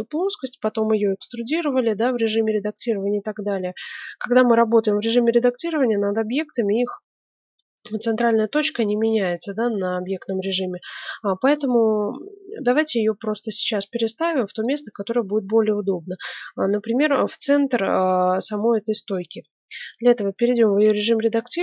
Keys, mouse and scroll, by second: 9.3-14.9 middle drag, 19.9 Tab.